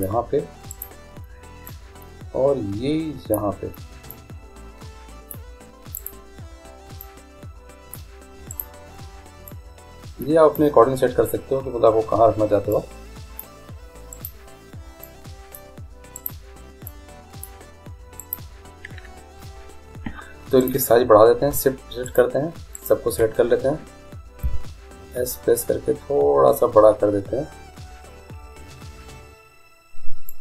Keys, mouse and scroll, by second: 0.7-2.5 right drag, 1.7-3.5 drag, 4.1-8.8 drag, 6.0-7.9 right drag, 8.5-10.3 right drag, 9.5-11.4 drag, 12.7-14.3 drag, 14.1 right click, 14.6 right click, 15.8-18.7 drag, 15.8 right click, 16.6-18.0 right drag, 18.2-20.1 right drag, 20.6-24.6 right drag, 24.4 s.